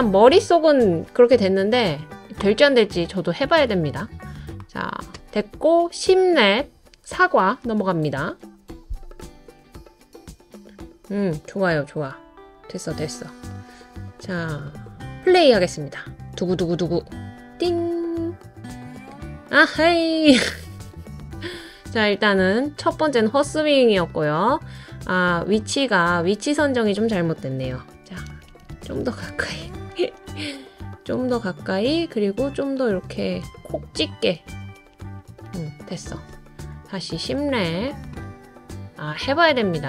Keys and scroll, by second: 28.0 Left, 28.3 Left, 28.4 Up, 28.6 Left, 28.7 Up, 28.9 Left, 29.0 Up, 29.3 Up, 34.5 Left, 35.3 Up.